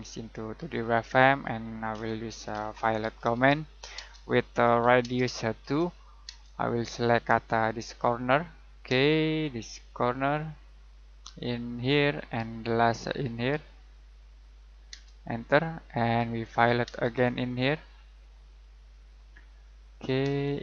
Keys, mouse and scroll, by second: 1.9-3.6 typing, 4.8 r, 5.0 space, 5.6 2, 6.2 space, 6.8-7.2 scroll up 1, 7.9 click, 8.3 middle click, 8.9 space, 9.9 click, 10.3 middle click, 11.7 click, 12.1 middle click, 12.6-14.4 scroll up 1, 14.4 click, 14.9 space, 15.2-15.9 scroll down 1, 15.9 middle click, 16.8 space, 17.5-18.8 scroll up 1, 18.8 click, 19.1 scroll down 1, 19.4 middle click, 19.7-20.2 scroll up 1, 20.2 space.